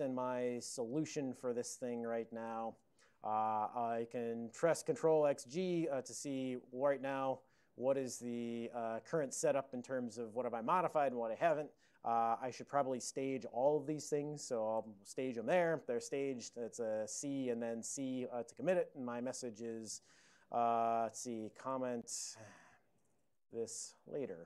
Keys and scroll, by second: 0.9 n, 1.1 Return, 2.1-2.5 typing, 2.8 Return, 5.1 ctrl+x, 5.5 g, 8.6 ctrl+n, 8.8 ctrl+n, 8.9 ctrl+n, 9.7 ctrl+n, 10.2 ctrl+n, 10.6 ctrl+l, 18.0 typing, 21.4-24.4 typing.